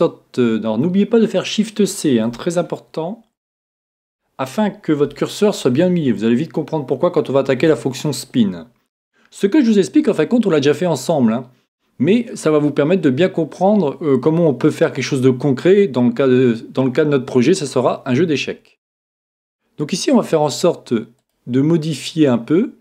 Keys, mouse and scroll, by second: 3.6 shift+c, 5.1-8.2 middle drag, 8.0-9.2 scroll up 1, 9.2 scroll up 1, 14.2-15.4 scroll down 1, 14.7-17.4 middle drag, 15.4-17.1 scroll down 1, 20.2-21.2 scroll up 1, 21.2 click, 21.2-21.9 scroll down 1, 21.9 scroll down 1.